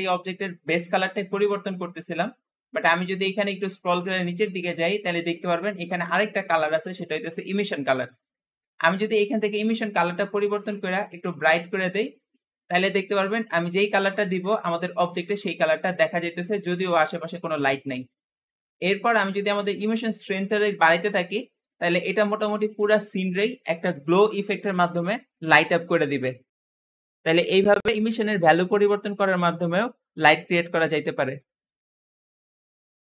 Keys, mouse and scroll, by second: 3.4-5.5 scroll down 16, 9.4 click, 20.0-23.1 drag.